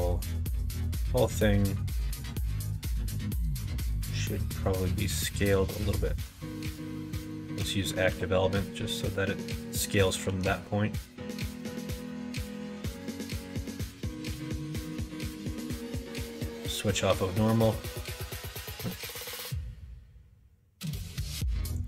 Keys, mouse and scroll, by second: 0.1 click, 0.5 l, 1.1-2.4 middle drag, 3.8 middle click, 6.2 2, 8.0 ., 10.2 s, 14.3 g, 15.5 ctrl+z, 16.3 ,, 18.7 ctrl+z, 19.0 ctrl+z, 21.7 click.